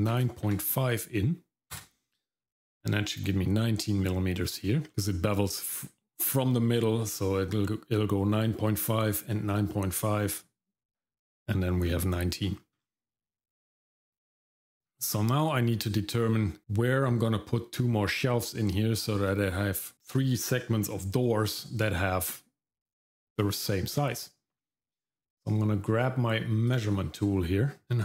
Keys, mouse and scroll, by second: 4.4-4.9 scroll down 2, 4.9 middle click, 4.9-7.5 scroll up 1, 11.8 scroll down 1, 12.4 middle click, 12.8-13.6 scroll down 2, 13.9 middle click, 14.4 middle click, 14.8 scroll up 1, 15.1-15.5 scroll down 2, 15.5 middle click, 16.5 scroll down 1, 16.6 middle click, 26.7 click, 27.8 middle click, 27.8-28.0 scroll down 1, 27.8 x.